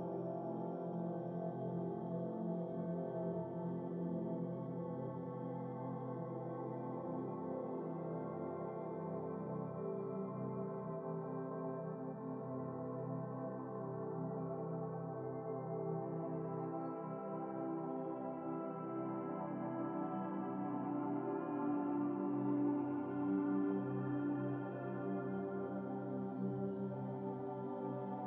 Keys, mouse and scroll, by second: 2.2-2.6 scroll up 6, 3.1 click, 4.4 click, 5.6-7.1 drag, 7.6 click, 8.5-10.1 drag, 10.2 Tab, 11.4 click, 11.9 shift+click, 12.5-14.0 drag, 14.0-14.5 scroll down 3, 15.1 ctrl+v, 17.7 click, 18.5 x, 19.4-20.7 drag, 22.0-22.5 scroll up 3, 22.5-22.8 scroll down 3, 23.3 click, 23.9-25.1 drag, 25.1 x, 26.6 click, 26.8 click, 27.8 ctrl+z.